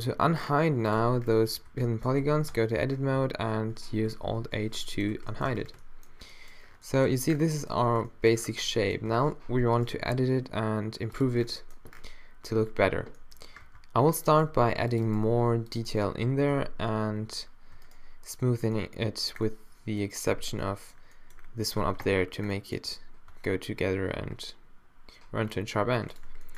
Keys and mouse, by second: 0.2 g, 1.0 Tab, 2.2 a, 2.5 Tab, 3.1 a, 4.4 alt+h, 5.1 a, 5.5 Tab, 9.1 Tab, 10.0 g, 13.7 ctrl+r, 14.6 ctrl+r, 15.4 ctrl+r, 16.3 a, 16.5 a, 17.9 shift+right click, 20.3 q, 21.8 Tab, 22.6 middle click, 23.3 Tab.